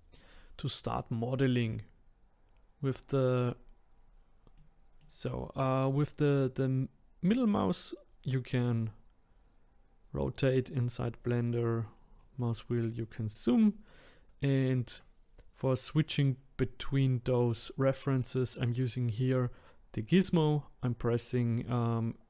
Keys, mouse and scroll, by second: 1.1 middle click, 1.9 middle click, 2.9 middle click, 3.1 middle click, 3.9-4.5 scroll down 5, 4.5-9.4 middle drag, 9.5 middle click, 11.6 middle click, 11.9-12.6 scroll up 6, 12.6 scroll down 1, 12.8-13.6 scroll up 4, 13.6-16.8 middle drag.